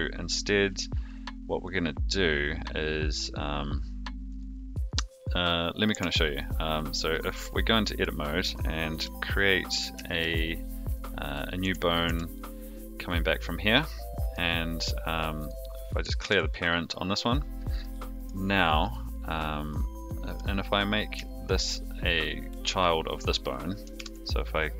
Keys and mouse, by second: 1.0 click, 1.7 click, 4.2 click, 5.9 Tab, 7.4 middle click, 8.9 KP_3, 10.0 shift+middle click, 10.9 click, 11.6 e, 15.3 click, 16.2 alt+p, 18.9 click, 21.6 shift+click, 23.9 ctrl+p.